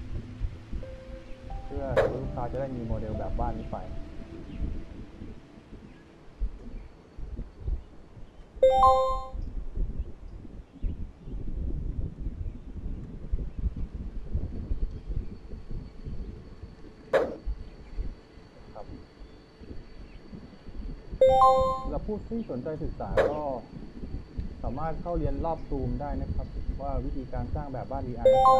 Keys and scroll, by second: 1.2 w, 3.9 w, 5.5 d, 6.8 a, 7.2 s, 9.1 a, 11.9 w, 13.6 w, 16.3 w, 18.1 a, 23.7 d, 25.7 s.